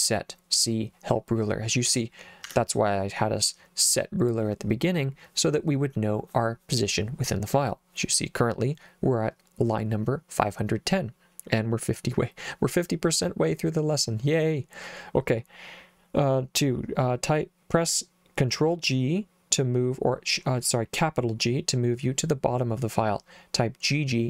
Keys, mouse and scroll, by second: 2.5 Escape.